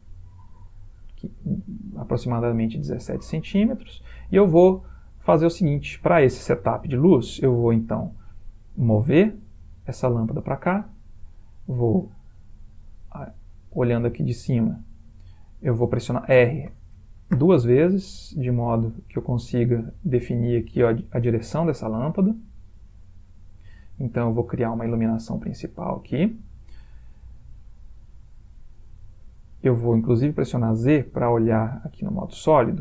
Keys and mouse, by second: 1.3 middle click, 5.5 middle click, 9.0 g, 11.1-12.8 middle click, 14.4 click, 16.8 r, 23.6 g, 25.3 r, 27.0 typing, 30.5 z.